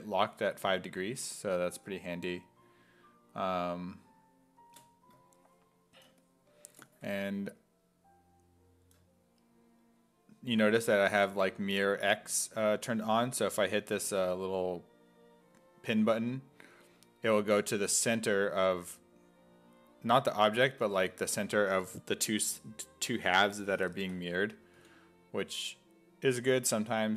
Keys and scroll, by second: 24.8 x.